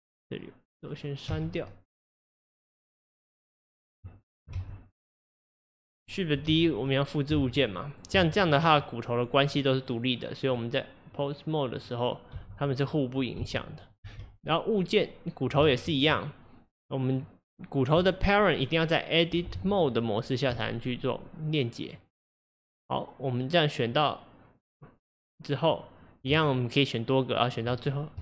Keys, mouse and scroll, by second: 1.4 x, 2.6 click, 3.4 click, 3.7 click, 4.3 shift+click, 4.6 x, 6.0 click, 6.5 shift+d, 7.4 shift+d, 8.3 shift+d, 10.5-11.8 drag, 12.4 g, 13.2 click, 13.4 g, 14.1 g, 15.7 ctrl+z, 16.7 click, 19.6 Tab, 21.9 click, 23.9 click, 27.4 shift+click.